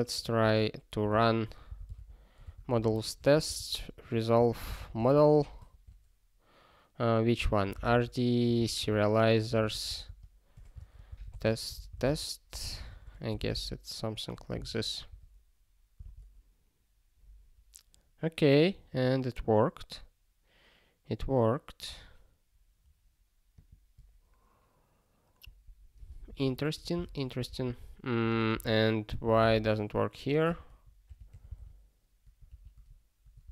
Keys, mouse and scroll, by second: 0.2 (, 2.5 Return, 2.7 space, 3.0 (, 4.8 Return, 5.0 space, 5.3 ', 7.7-13.3 typing, 14.6 ctrl+s, 15.1 ctrl+e, 23.6 click, 25.4 ctrl+a, 26.0 ctrl+space, 26.1 ctrl+e, 26.4 alt+;, 27.0 ctrl+s, 27.5 super+b, 31.4 ctrl+g, 31.7 ctrl+r, 32.4 ctrl+g.